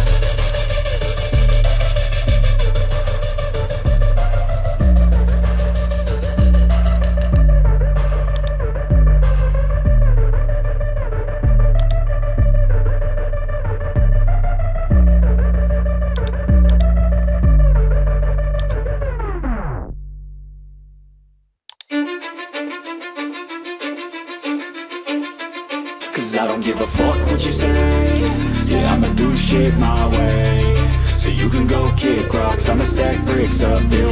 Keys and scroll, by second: 5.1 Return, 9.3 ctrl+t, 13.6 Return, 17.7 ctrl+z.